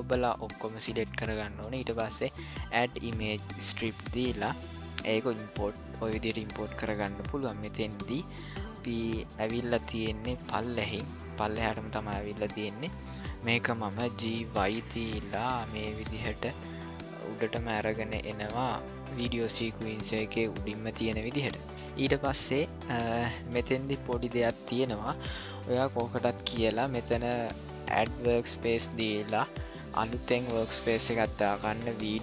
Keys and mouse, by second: 8.6-11.0 drag, 13.5 g, 15.6 click, 16.6 g, 17.5 g, 21.9 click, 23.1 click, 27.9 click.